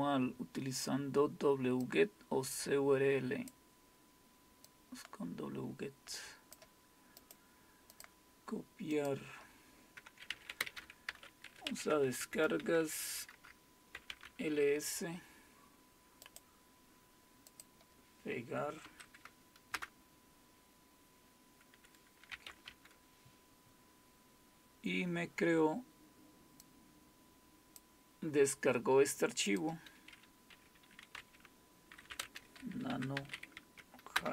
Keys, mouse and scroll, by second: 0.0-0.5 scroll down 1, 1.8-3.5 drag, 4.7-6.6 drag, 6.9 click, 7.2 right click, 7.9 click, 9.0 click, 9.6 click, 11.1-12.6 typing, 11.9 Tab, 12.3 Return, 13.7-14.6 typing, 16.2-17.5 right drag, 16.2 typing, 17.5 click, 18.8 Right, 19.5-20.2 typing, 22.3 typing, 22.7 Return, 26.6-27.8 drag, 29.5 click, 32.1-33.7 typing, 34.1 Return.